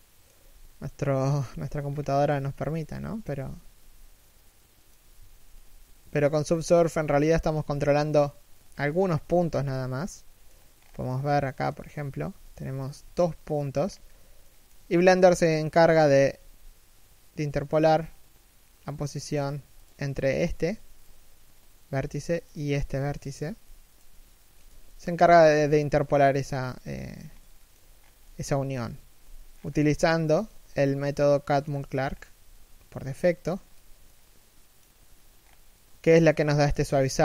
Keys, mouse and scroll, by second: 0.1 KP_3, 0.4 KP_1, 0.9 scroll up 1, 1.8 z, 2.2 shift+middle click, 2.5 z, 3.9 middle click, 4.7 a, 4.9 3, 5.3 KP_1, 5.9 alt+right click, 6.2 z, 6.4-6.8 scroll down 1, 6.8 alt+shift+middle click, 8.4-8.7 scroll up 1, 8.7 right click, 8.8 g, 9.3 middle click, 10.4-10.9 scroll up 1, 10.9 middle click, 11.8 g, 12.5 shift+right click, 12.7 g, 13.5-14.1 scroll up 1, 14.1 shift+middle click, 19.1 g, 24.4 z, 24.5 middle click, 24.9 z, 26.3 1, 26.9 scroll down 1, 27.2 shift+middle click, 27.6 scroll down 1, 27.9 middle click, 28.3 1, 29.2 scroll down 1, 29.4-30.0 scroll up 1, 35.0-35.4 scroll up 1, 35.4 shift+middle click, 36.5 scroll up 1.